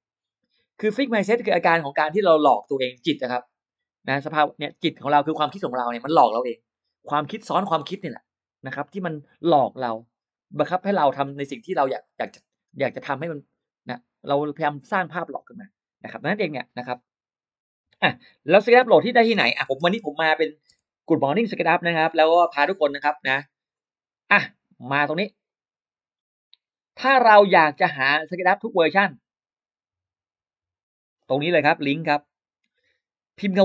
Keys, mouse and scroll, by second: 17.8-21.1 typing, 21.7 Return, 25.3 click, 30.7-31.8 drag.